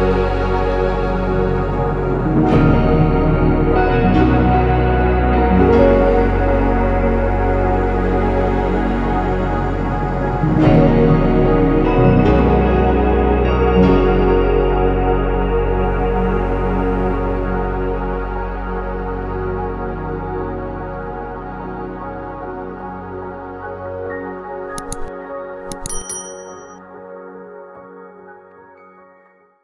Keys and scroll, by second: 5.3 Escape, 6.0-6.9 typing, 7.1 ctrl+s, 7.9 ctrl+s.